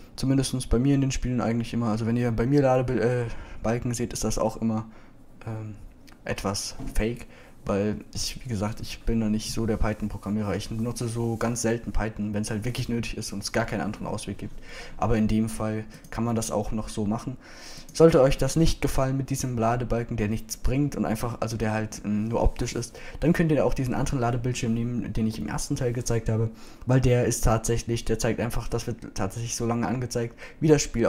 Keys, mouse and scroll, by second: 15.7-17.2 middle drag, 17.2-18.8 drag, 19.9 middle click, 20.7 middle click.